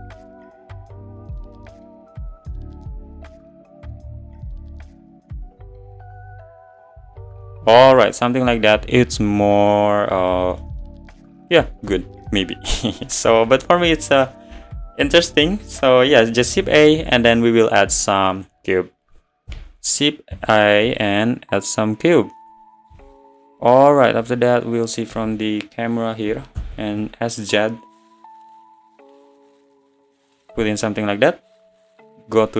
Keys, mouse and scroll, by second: 0.6 shift+d, 1.0 g, 1.3 g, 2.7 click, 3.0 ctrl+z, 3.2 ctrl+z, 3.4 scroll down 2, 3.9 shift+d, 4.2 g, 5.6 shift+d, 5.9 g, 6.9 click, 8.0 click, 10.6-11.4 middle drag, 11.4-11.9 scroll up 3, 11.9-12.7 middle drag, 12.7 scroll up 1, 13.1-18.5 middle drag, 18.5 shift+a, 19.5 s, 23.3-24.4 scroll down 7, 23.7 `, 25.1 s, 26.3 s.